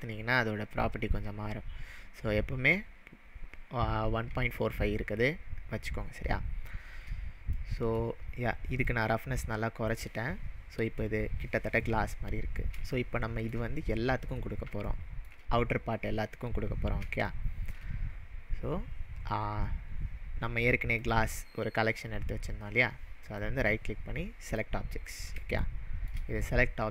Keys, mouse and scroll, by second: 7.1-7.6 scroll down 2, 7.6-8.8 middle drag, 8.8-10.0 drag, 12.3-12.7 scroll down 2, 13.0-13.5 shift+middle drag, 16.5-17.0 scroll down 4, 17.3-17.8 shift+middle drag, 21.0 click, 23.2 right click, 24.4-25.7 right drag, 24.4 click, 25.7-26.2 shift+middle drag.